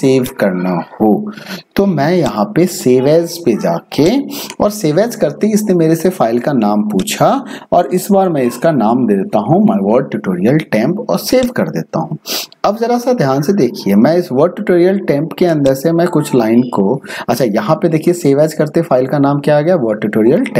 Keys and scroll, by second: 8.1-9.4 typing.